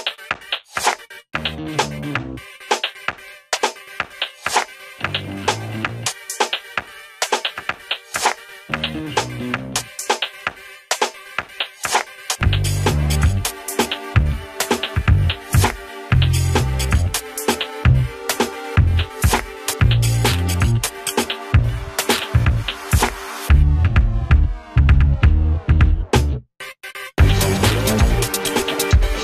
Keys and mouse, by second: 2.6 click, 3.7 ctrl+z, 4.0 ctrl+space, 4.6-8.2 drag, 8.2 z, 9.1-10.5 drag, 10.5 ctrl+z, 10.9-19.5 drag, 22.0 click, 24.8 ctrl+a, 25.6 click, 28.1 Delete.